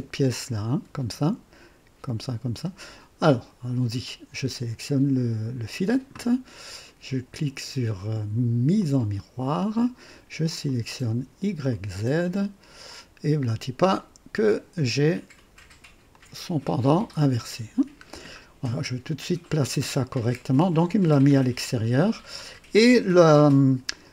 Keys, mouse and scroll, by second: 8.7 click, 10.6 click, 11.7 click, 12.9 click, 13.9 click, 14.7-16.0 drag, 16.1-17.0 drag, 17.2 scroll up 2, 18.0 scroll down 2, 19.8-20.1 scroll down 1, 23.3 click.